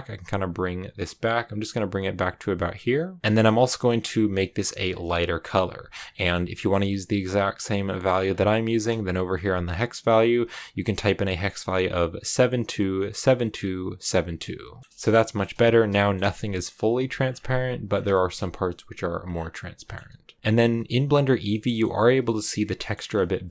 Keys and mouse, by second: 14.9 shift+middle click, 15.8 shift+click, 16.0 shift+middle click, 18.0 shift+middle click, 19.7 middle click, 20.6 shift+middle click, 21.4 shift+middle click, 22.7 middle click.